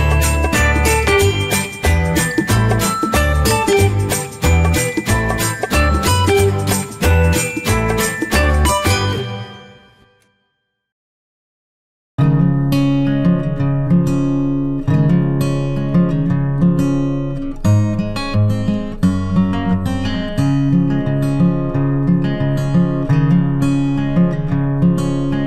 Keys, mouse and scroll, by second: 0.0-1.0 typing, 3.1 typing, 9.5-10.2 typing, 13.8 click, 17.7 click.